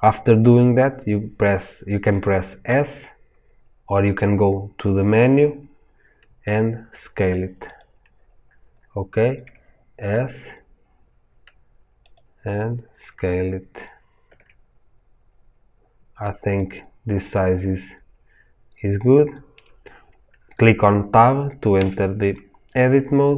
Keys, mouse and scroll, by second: 2.7 s, 7.7 click, 8.0 scroll down 1, 9.4 s, 12.4-12.7 scroll down 2, 14.3 s, 17.4-23.3 middle drag, 21.7 Tab.